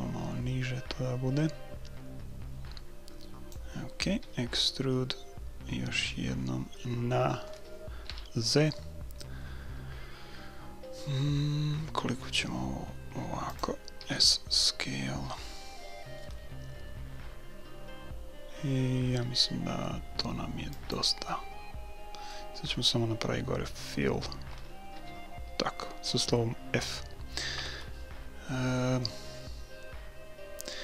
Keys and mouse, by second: 4.2 e, 14.0 s, 21.3-23.0 middle drag, 25.0 f, 27.6 KP_1.